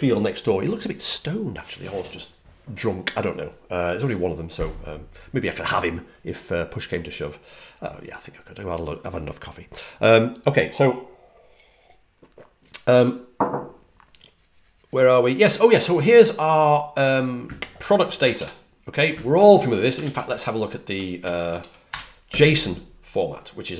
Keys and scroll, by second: 18.1 super+=, 18.3 super+=, 19.9 super+l.